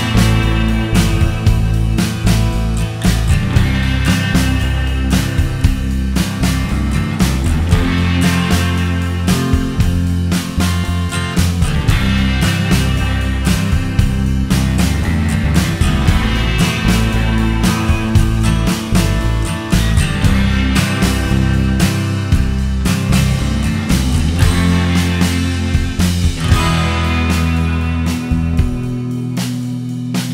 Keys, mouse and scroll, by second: 1.8 middle click, 19.3 click, 23.5 middle click, 24.9 click, 26.3 click.